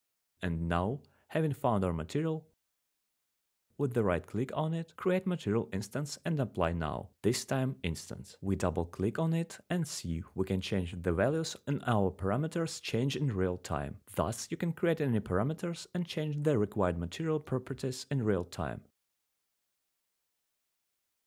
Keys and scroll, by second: 16.5 ctrl+z, 20.3 ctrl+z.